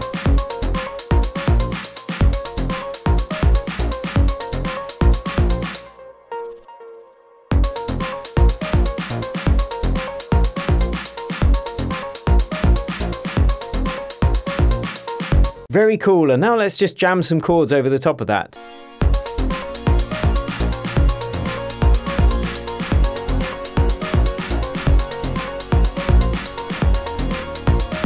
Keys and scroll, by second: 1.9 super+d.